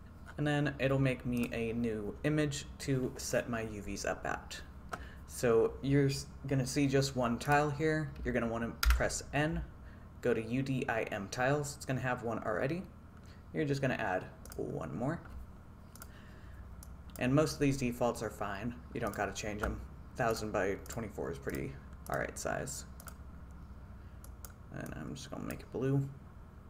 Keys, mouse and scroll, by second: 9.0 n, 14.5-26.6 drag.